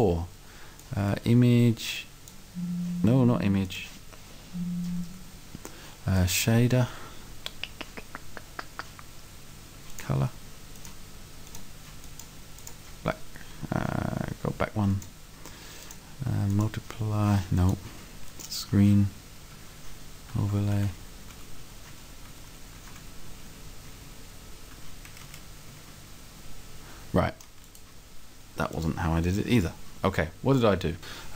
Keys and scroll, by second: 19.6 Down.